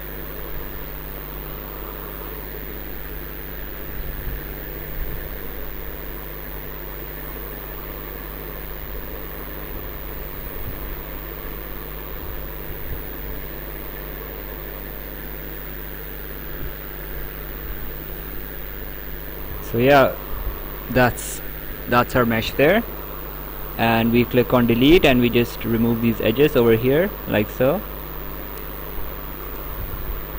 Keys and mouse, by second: 0.0 right click, 2.2 click, 5.1 right click, 7.3 click, 8.9 click, 11.2 click, 13.8 click, 15.5 right click, 16.6 right click, 19.2 click, 22.0 right click, 23.4 click, 24.6 click, 27.9 click, 29.1 click.